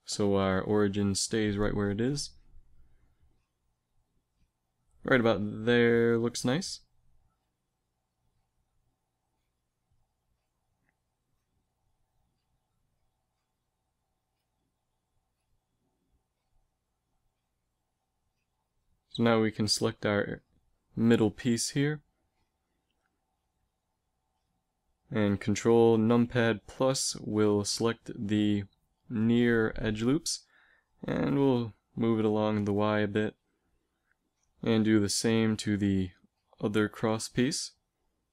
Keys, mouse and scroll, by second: 4.0 g, 8.0 a, 12.3 Tab, 17.7 Tab, 21.6 KP_Decimal, 24.8 ctrl+KP_Add, 27.6 ctrl+KP_Add, 29.9 g, 33.9 Tab, 34.6 Tab, 36.1 ctrl+KP_Add, 36.3 ctrl+KP_Add.